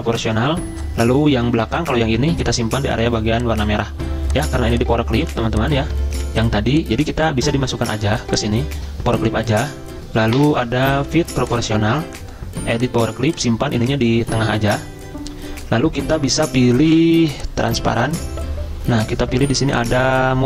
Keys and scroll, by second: 5.3 ctrl+z, 6.0 ctrl+z.